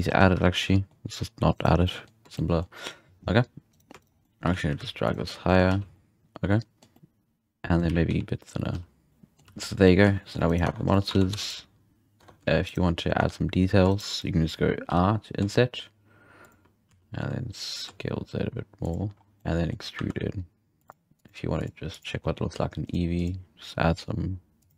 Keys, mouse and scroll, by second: 0.0-0.6 scroll down 4, 0.6-1.0 middle drag, 1.0-1.5 scroll up 1, 1.5 right drag, 1.8-2.7 middle drag, 2.7-3.7 scroll up 2, 3.7-4.1 right drag, 4.1 scroll down 2, 4.2 middle click, 4.4 g, 5.2-5.7 scroll down 3, 5.4 middle click, 5.7 alt+a, 5.9-7.9 middle drag, 7.8 s, 9.1-9.6 middle drag, 9.4 z, 9.6 scroll up 1, 9.8 middle click, 10.0 z, 10.3-10.9 scroll up 3, 10.4 right click, 10.6 Tab, 10.9 middle click, 11.1 alt+a, 11.3 3, 11.4 right drag, 11.7-12.2 scroll up 2, 12.2 Tab, 12.6 shift+right click, 13.2 Tab, 13.9-14.8 shift+right drag, 14.8 i, 16.8 s, 19.2 scroll down 1, 19.4 middle click, 19.7 scroll up 2, 20.0 e, 20.9 click, 21.6-24.7 drag.